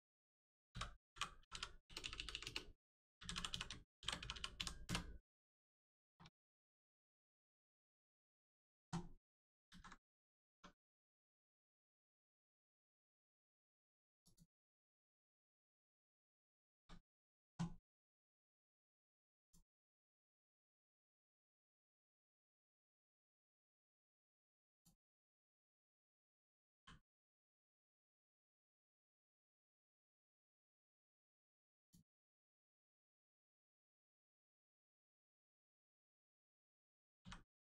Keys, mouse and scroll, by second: 0.6 F2, 1.4 i, 1.8 BackSpace, 3.4 e, 3.9 shift+g, 4.5 p, 4.8 Return, 5.9 shift+middle click, 6.4-7.1 scroll up 1, 7.1 click, 7.4 middle click, 9.6 alt+z, 9.9 middle click, 10.4 Tab, 10.7 middle click, 11.0 scroll up 1, 11.4 middle click, 12.7 click, 15.0 middle click, 15.6 click, 15.9 shift+middle click, 16.2 scroll down 1, 16.6 shift+middle click, 18.0 click, 20.6 click, 25.3 click, 26.7 l, 27.3 click, 30.2 click, 32.5 click.